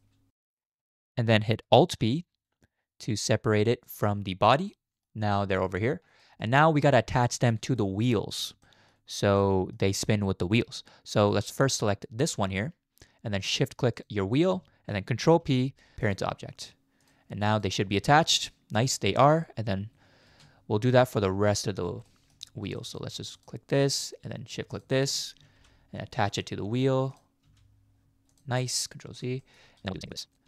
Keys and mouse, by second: 0.3 shift+middle click, 1.9 alt+p, 4.7-5.1 drag, 6.2 drag, 7.0-7.5 shift+drag, 7.5 shift+middle click, 7.8-8.1 middle drag, 8.6 shift+middle drag, 9.4 middle click, 11.2 click, 13.9 shift+click, 15.4 ctrl+p, 17.5 click, 18.0 g, 20.3 ctrl+z, 20.9 click, 22.1 shift+middle click, 22.8 shift+middle click, 23.4 click, 24.8 shift+click, 25.6 ctrl+p, 27.5 g, 29.1 ctrl+z, 29.4 click, 29.9 shift+click, 30.1 shift+click, 30.2 click.